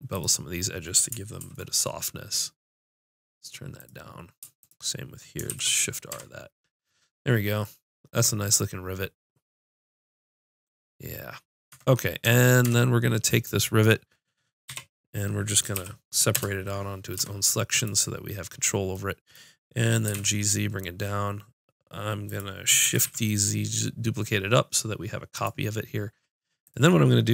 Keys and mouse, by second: 1.4 ctrl+b, 5.4 shift+r, 6.1 Tab, 11.7 Tab, 12.2 Tab, 12.6 Tab, 14.6 l, 15.7 p, 17.1 Tab, 19.2 click, 20.0 g, 22.3 click, 22.8 shift+d, 22.9-24.3 drag, 26.6-27.3 drag.